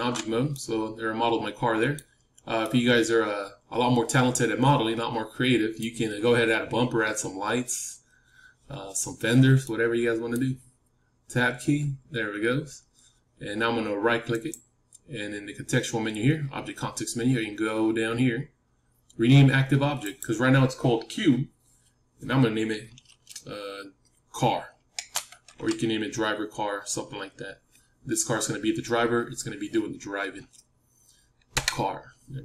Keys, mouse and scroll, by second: 0.5-4.5 middle drag, 9.6-11.8 middle drag, 11.2 Tab, 14.2-31.5 right drag.